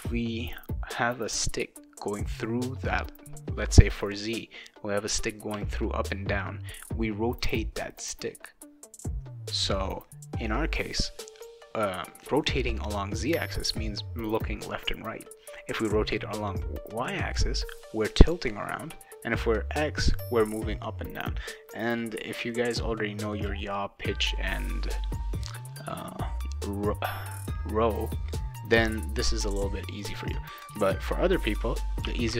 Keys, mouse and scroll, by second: 29.9 click, 32.0 0.